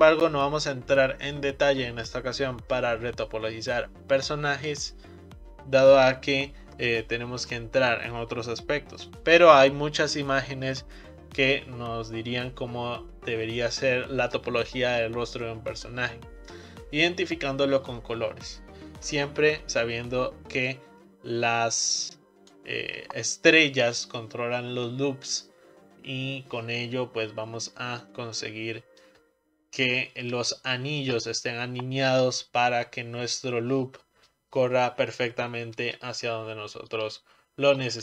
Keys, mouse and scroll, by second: 19.7-20.7 scroll down 2, 20.7-23.9 drag, 28.0-33.7 shift+middle drag, 36.2-38.0 shift+middle drag.